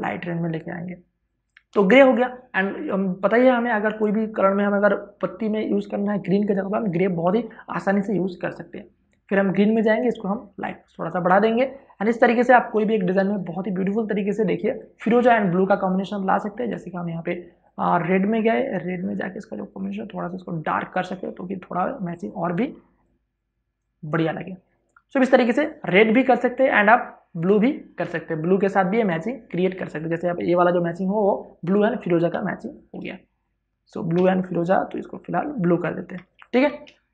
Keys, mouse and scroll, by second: 13.0 ctrl+space, 13.2 ctrl+click, 13.5 ctrl+space, 16.5-22.5 drag, 22.5 ctrl+space, 22.8 ctrl+click, 23.3 ctrl+space, 24.8 v, 25.7 click, 31.8 click, 32.1 w, 32.3 click, 33.9 i, 35.2 click, 36.0 alt+BackSpace, 36.4 ctrl+d.